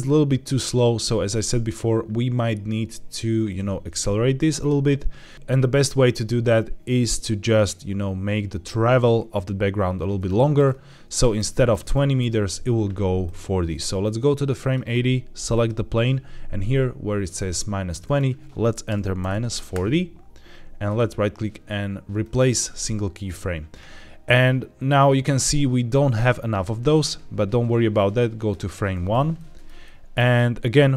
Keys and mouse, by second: 5.3 KP_0, 10.1-10.5 middle drag, 11.1 middle click, 11.4 middle drag, 11.8 shift+middle drag, 13.1-14.7 drag, 15.5 click, 18.0 click, 20.7 right click, 26.8-28.4 drag, 29.2-29.6 shift+middle drag, 29.7-30.3 middle drag.